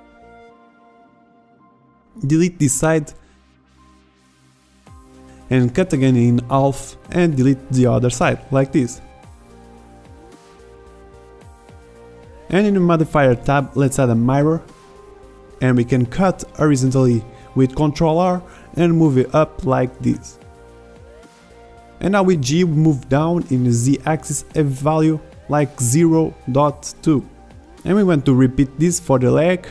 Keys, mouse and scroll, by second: 0.1 a, 0.5 b, 1.9 Delete, 4.4 ctrl+r, 7.4 a, 8.0 b, 9.2 Delete, 12.8 click, 16.1 middle click, 16.7 middle click, 16.9-18.1 middle drag, 19.7 ctrl+r, 23.9 g, 29.3 ctrl+r.